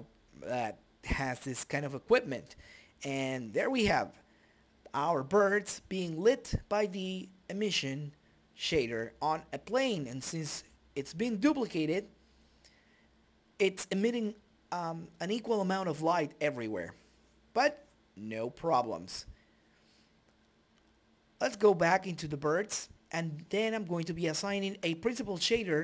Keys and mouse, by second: 0.2 s, 1.0 g, 2.2 click, 3.0 ctrl+s, 3.5 shift+z, 5.4-6.8 drag, 7.0 click, 7.6 right click, 8.0 right click, 10.2 click, 10.8 middle click, 11.4 click, 11.6 middle click, 11.7-13.8 drag, 13.3 shift+a, 15.9-17.3 drag, 18.0 middle click, 19.2-20.6 drag, 21.7 middle click, 23.2 middle click.